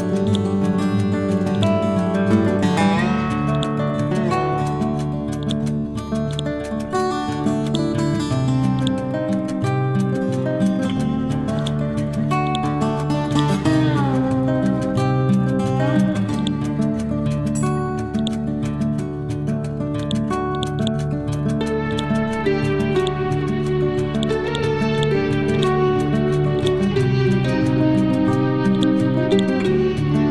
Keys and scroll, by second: 27.9 b, 29.8 Down.